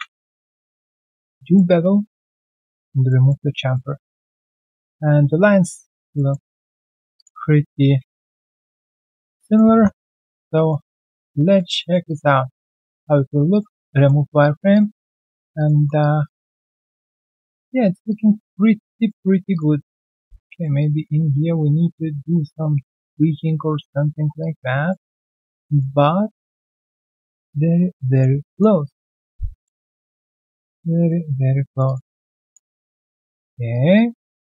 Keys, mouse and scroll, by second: 0.6 alt+click, 1.4 alt+middle click, 2.7 alt+click, 3.1 alt+middle click, 3.4 alt+right click, 3.7 alt+middle click, 3.9 alt+right click, 6.1 alt+middle click, 6.6 right click, 8.0 scroll down 1, 8.1 alt+middle click, 8.5 alt+right click, 8.8 alt+click, 9.1 alt+middle click, 9.3 alt+click, 10.1 right click, 11.1 alt+click, 11.4 alt+right click, 11.7 alt+middle click, 12.0 alt+click, 12.2 alt+right click, 13.9 alt+middle click, 14.1 alt+right click, 14.4 alt+click, 14.9 alt+right click, 15.2 alt+middle click, 15.7 3, 16.0 double click, 16.2 alt+click, 16.6 alt+middle click, 17.3 alt+right click, 17.5 alt+click, 17.7 alt+middle click, 18.1 alt+click, 18.6 alt+right click, 18.9 alt+middle click, 19.1 alt+right click, 19.8 alt+right click, 20.3 alt+middle click, 20.7 alt+click, 21.6 alt+middle click, 21.9 right click, 22.9 double click, 24.3 ctrl+click, 24.8 alt+middle click, 25.1 alt+scroll down 1, 25.4 alt+middle click, 25.6 alt+right click, 28.4 alt+middle click, 29.7-30.0 alt+scroll down 1, 30.0 alt+middle click, 30.7 alt+right click, 31.0 alt+middle click, 31.8 double click, 32.3 ctrl+click.